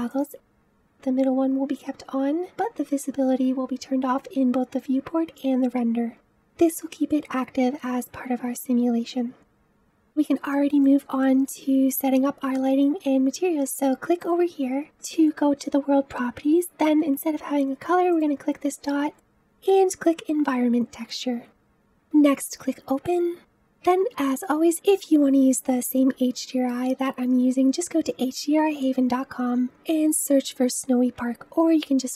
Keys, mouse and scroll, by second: 9.4-13.9 middle drag, 14.1 click, 18.0-20.5 drag, 21.6-23.3 drag.